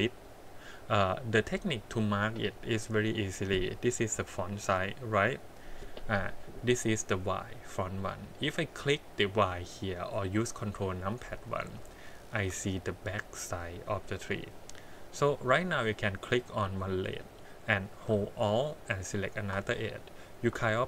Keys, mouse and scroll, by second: 1.6 middle click, 3.0 middle click, 4.1 KP_1, 7.9 middle click, 10.6 click, 12.0 shift+middle click, 16.4 click, 19.1 alt+click.